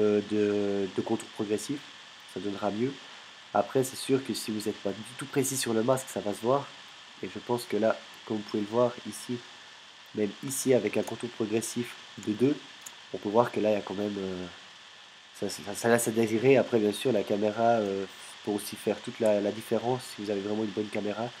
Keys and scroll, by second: 10.5 space, 12.2 space.